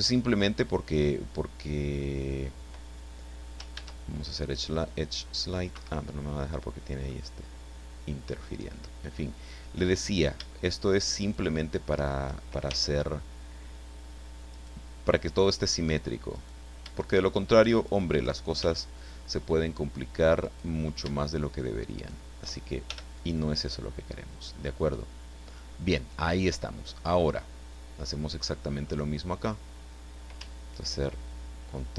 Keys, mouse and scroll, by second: 3.7 ctrl+e, 4.4 click, 5.7 Escape, 7.0-8.6 middle drag, 9.8 right click, 11.2 shift+right click, 12.7 shift+f, 14.5 right click, 16.4 right click, 17.9 shift+right click, 18.6 shift+f, 20.4 right click, 22.0 shift+right click, 22.9 shift+f, 26.9-28.7 middle drag, 28.8-29.6 scroll up 4.